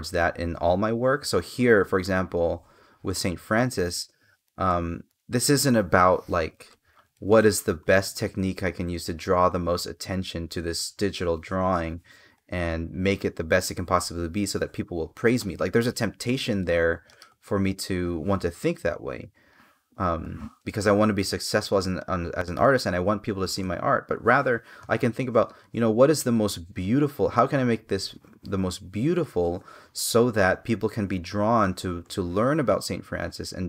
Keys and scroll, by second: 4.2 space, 6.4 space, 19.9 space, 24.6 space, 27.0 space.